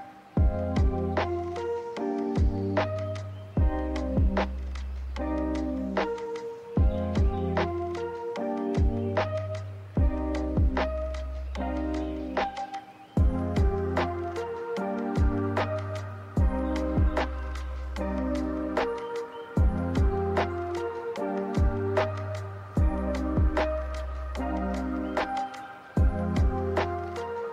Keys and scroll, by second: 4.5 w, 14.1 ctrl+h, 24.3 ctrl+z, 24.5 ctrl+z, 24.8 ctrl+z.